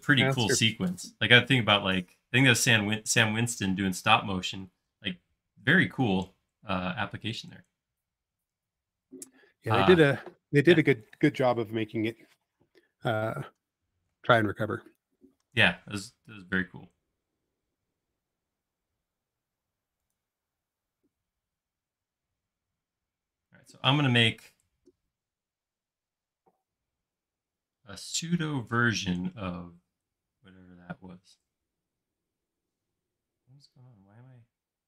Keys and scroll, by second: 14.0 shift+q, 15.2-15.9 typing, 33.0 space.